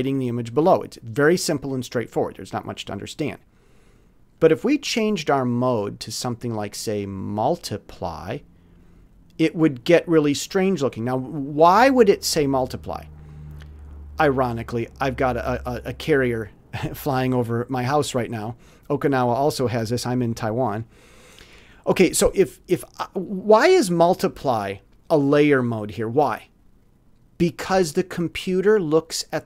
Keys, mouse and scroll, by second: 0.0 middle click, 0.5 middle click, 4.4 click.